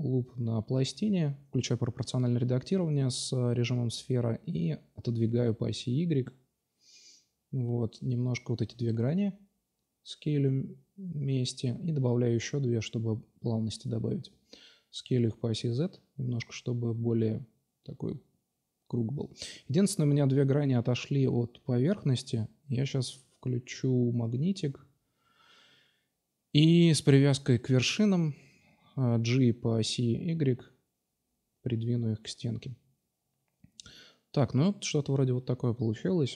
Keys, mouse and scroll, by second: 1.0 g, 3.4-5.4 drag, 6.3 o, 6.4 o, 7.0 s, 10.3 ctrl+r, 11.1-12.5 drag, 11.7 ctrl+r, 12.5 2, 12.8-13.9 drag, 14.8 s, 17.3 click, 17.6-18.7 middle drag, 18.7 click, 19.4-24.9 middle drag, 24.9-26.0 drag, 26.5 g, 27.6-28.8 drag, 29.5 Tab, 29.9 click, 30.5 Tab, 31.4 l, 32.1-33.1 drag, 35.2-36.3 middle drag.